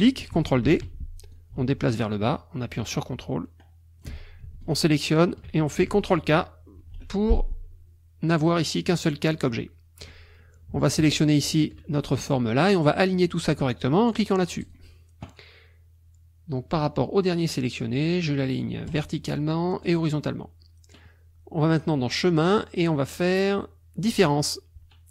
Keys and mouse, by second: 0.6 ctrl+d, 1.3-4.2 ctrl+drag, 4.6 shift+click, 6.8 ctrl+k, 11.2 shift+click, 14.6 click, 18.9 click, 19.9 click, 21.7 click, 24.2 click.